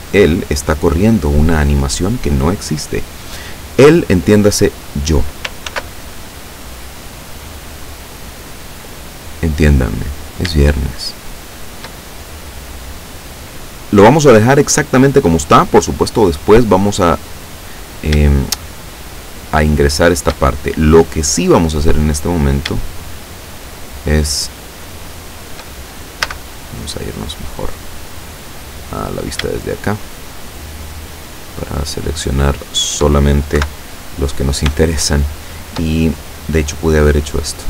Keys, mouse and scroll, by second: 0.1 click, 5.7 ctrl+r, 6.4 click, 8.2 click, 10.9-11.9 shift+middle drag, 12.4-12.7 scroll up 2, 17.7 right click, 19.2 shift+right click, 19.7 shift+right click, 21.9 right click, 23.0 shift+right click, 24.6 shift+right click, 26.3 a, 26.8 middle click, 27.9-29.1 middle drag, 29.1 scroll down 2, 29.7 shift+right click, 30.7 shift+right click, 31.7 shift+right click, 32.7 shift+right click, 33.7 KP_7, 34.9-35.9 shift+drag, 37.3 click.